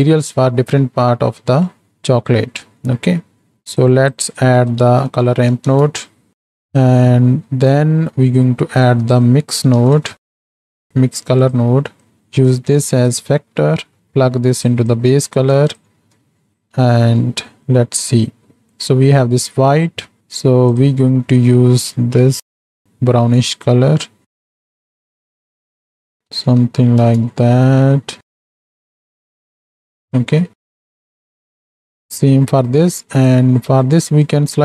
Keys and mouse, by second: 1.8 middle click, 2.6 middle click, 3.5 ctrl+h, 3.8-6.3 drag, 6.5 click, 7.1 click, 8.2 middle click, 9.1-11.5 drag, 12.1 click, 12.6 click, 13.5 middle click, 14.0-14.7 drag, 15.0 click, 16.5 drag, 16.9 middle click, 19.6 middle click, 30.9 click, 33.2 click.